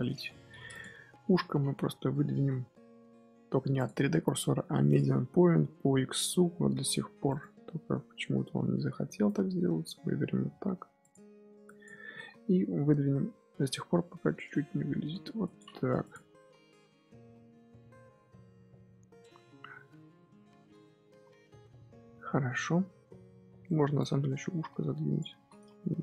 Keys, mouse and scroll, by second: 0.6 click, 0.8 KP_3, 1.1 KP_1, 1.7 Tab, 2.3 z, 3.7-6.6 drag, 6.6 g, 9.2 click, 10.3 g, 11.6 click, 12.0 z, 12.3 middle click, 12.9 g, 15.7 scroll down 4, 15.8 Tab, 15.9 click, 16.1 scroll up 1, 16.3-17.2 middle drag, 17.2 scroll down 1, 17.5-20.1 middle drag, 20.1-20.6 scroll up 5, 20.6 Tab, 20.7 middle click, 21.0 z, 21.5-21.9 scroll up 2, 21.9 middle click, 22.8 z, 23.3 z, 23.6 middle click, 23.9 click, 25.3 z, 25.4 middle click, 25.8 g.